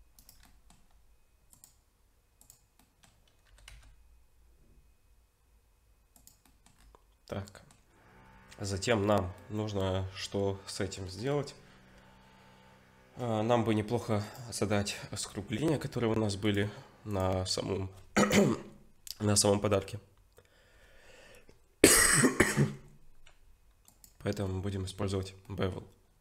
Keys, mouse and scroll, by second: 0.4 middle click, 1.5 click, 2.8 middle click, 4.5 g, 6.5 middle click, 6.8-7.3 scroll down 1, 7.3 middle click, 7.3-8.2 scroll down 3, 8.2-9.4 scroll up 1, 9.4 middle click, 14.2 click, 14.7 middle click, 15.4-16.4 scroll up 2, 16.4 click, 16.4-17.1 scroll up 1, 24.5 middle click, 25.2 scroll up 1, 25.4 middle click.